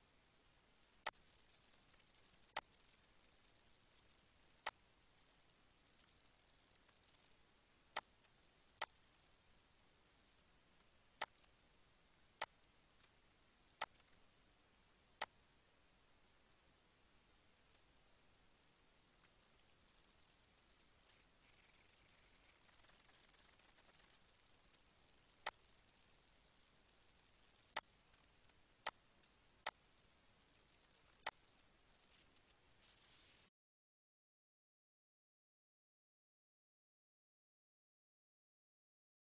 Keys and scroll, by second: 26.8 -, 30.4 ctrl+s.